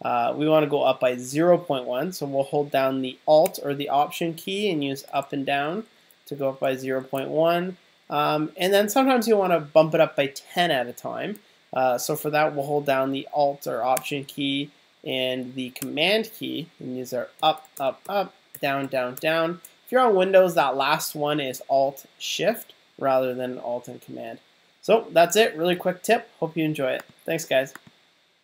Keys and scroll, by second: 5.1 alt+Down, 5.2 alt+Up, 6.4 alt+Down, 17.4 alt+super+Up, 18.5 alt+super+Down.